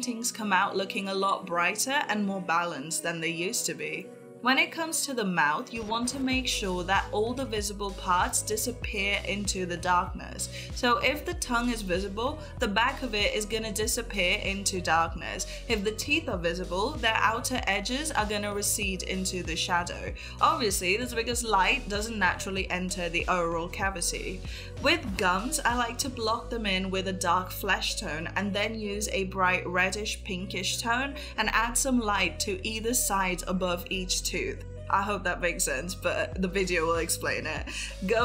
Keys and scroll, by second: 0.5 ], 5.3 ctrl+s, 9.4 ], 10.8 [, 11.6 ], 16.0 [, 18.1 [, 18.7 ], 22.7 [, 25.1 ], 35.7 [, 36.4 space.